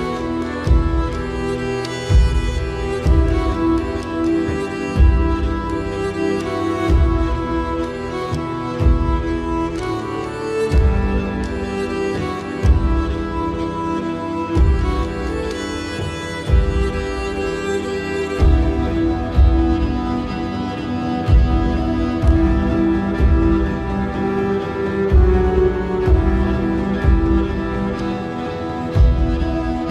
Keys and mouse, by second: 0.5 i, 6.4 middle click, 8.5 shift+click, 12.0 ctrl+KP_1, 13.1 s, 15.1 middle click, 16.8-17.9 middle drag, 19.2 alt+e, 26.4 alt+e.